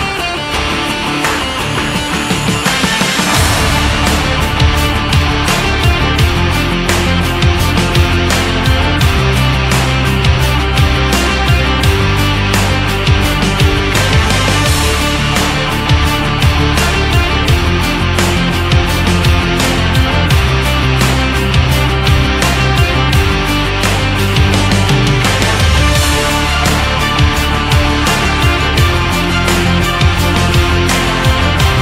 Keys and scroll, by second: 16.3 shift+Up, 17.3 Right, 17.9 Right, 18.6 Right, 19.5 Right.